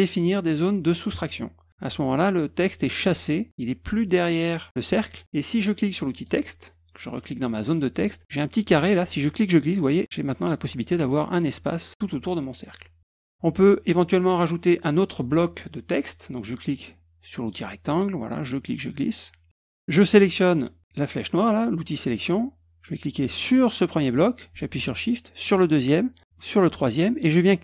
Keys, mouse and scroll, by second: 1.1 click, 6.1 click, 7.6 click, 8.7-9.8 drag, 13.0 click, 13.1 click, 17.3 click, 18.4-19.5 drag, 22.0 click, 23.5 click, 25.4 shift+click, 26.3 shift+click.